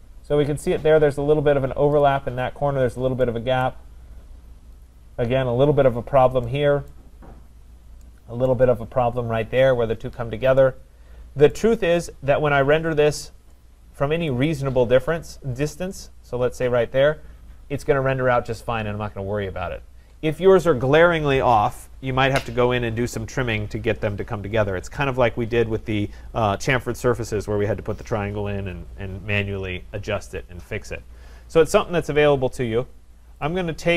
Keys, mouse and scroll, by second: 1.8-3.2 scroll down 9, 2.0 click, 3.2-3.7 scroll down 1, 3.7 right click, 4.2-4.8 scroll down 3, 5.5-6.5 scroll, 6.5 scroll, 6.9 right click, 7.5-8.0 scroll, 8.5 right click, 11.5 right click, 11.8-12.2 scroll, 12.7-13.1 scroll, 13.5 right click, 13.8-14.3 scroll, 15.3 right click, 15.6-16.1 scroll, 16.2-17.7 scroll, 17.7-18.5 scroll, 31.9-33.4 scroll, 33.4 scroll, 33.5 click.